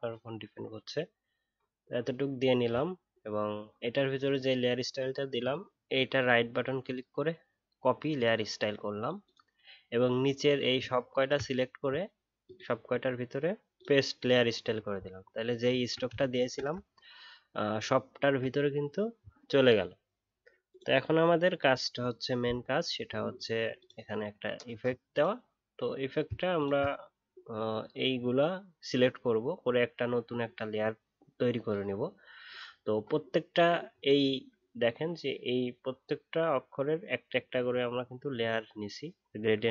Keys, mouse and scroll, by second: 11.1 shift+click, 15.1 alt+scroll up 1, 15.6 alt+scroll down 1, 17.7 alt+scroll down 1, 26.5 shift+click.